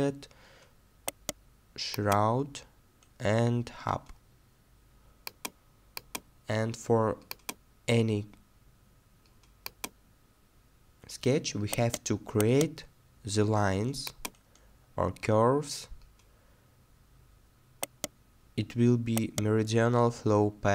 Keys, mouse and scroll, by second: 1.0 right click, 8.1-9.2 scroll up 1, 11.7 right click, 14.5 scroll down 1, 17.8 right click.